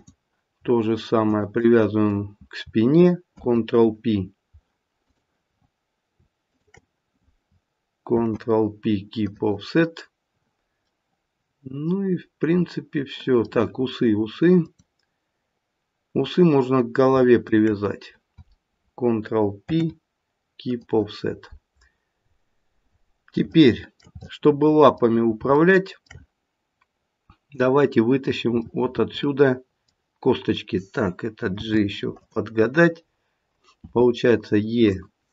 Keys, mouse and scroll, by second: 1.3 shift+click, 3.3 ctrl+p, 5.0 click, 8.1 ctrl+p, 10.8 middle click, 13.7-14.6 scroll up 1, 14.6 click, 17.4 shift+click, 19.7 ctrl+p, 21.8-22.6 scroll down 2, 23.5 shift+middle click, 24.2 middle click, 26.5 middle click, 28.4 click, 28.6 middle click, 29.4 middle click, 31.6 g, 33.8 e.